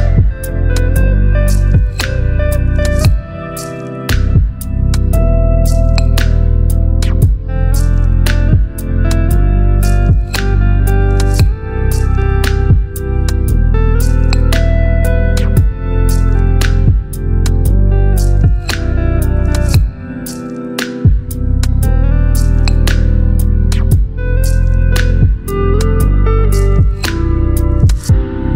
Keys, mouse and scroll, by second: 1.3 alt+scroll up 1, 2.4 b, 3.3 right click, 4.4-7.8 drag, 6.5-7.1 click, 7.9 x, 8.9 alt+scroll up 1, 9.7 right click, 11.3 click, 12.5 alt+right click, 14.5-17.0 drag, 18.7 ctrl+z, 21.8 ctrl+z, 21.9-26.2 drag, 23.2-25.6 drag, 26.2 alt+scroll up 2, 26.7-27.4 drag.